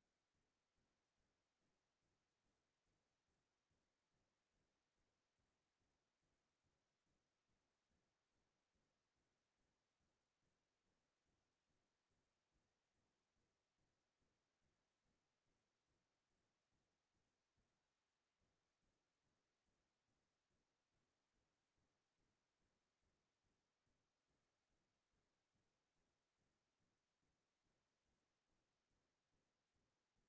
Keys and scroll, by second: 3.3 Down, 5.1 Down, 5.7 Down, 9.6 ctrl+space, 14.9 ctrl+space, 23.5 ctrl+s.